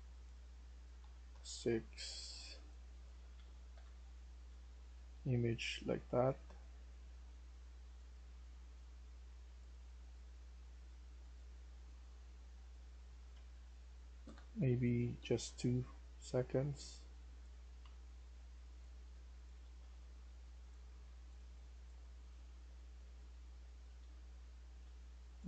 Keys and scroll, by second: 0.9-5.6 typing, 10.1 typing, 13.2 4, 14.1 BackSpace, 15.1 2, 16.3-24.6 typing.